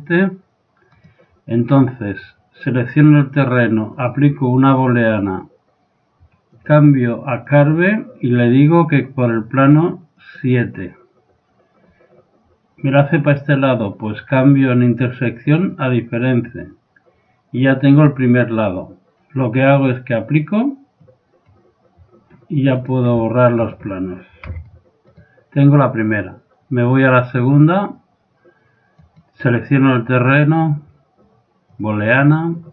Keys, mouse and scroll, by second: 0.9 right click, 2.6 click, 4.0-5.7 drag, 6.5-10.3 drag, 14.4-16.2 drag, 21.1-22.9 drag, 22.8-26.9 right drag, 24.5 x, 27.6 click, 28.0-29.6 drag, 29.0 right click, 29.6 right click, 30.7 middle click, 30.9 right click, 31.0-32.5 drag.